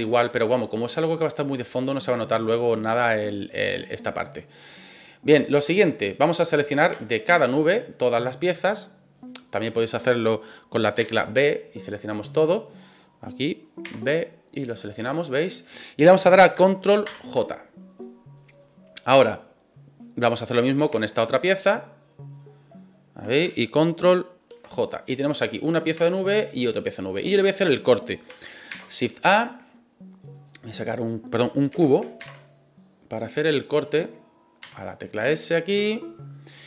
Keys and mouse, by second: 0.6 right click, 1.2 click, 1.8 right click, 2.3 click, 2.9 right click, 3.4 click, 4.0 right click, 4.5 click, 5.3 right click, 5.8 click, 6.5 middle click, 7.1 shift+right click, 7.5 shift+right click, 7.8 shift+right click, 8.3 shift+right click, 8.7 shift+right click, 9.1 shift+right click, 10.9 b, 12.2 right click, 13.8 b, 15.0 middle click, 17.0 ctrl+j, 18.3 click, 18.6 right click, 20.0 middle click, 20.6 right click, 21.1 shift+right click, 21.6 shift+right click, 22.0 shift+right click, 22.3 shift+right click, 22.8 shift+right click, 24.5 ctrl+j, 25.0 right click, 25.3 right click, 26.3 right click, 27.2 middle click, 28.7 shift+a, 31.7 ctrl+z, 32.2 shift+a, 34.6 s, 35.4 click.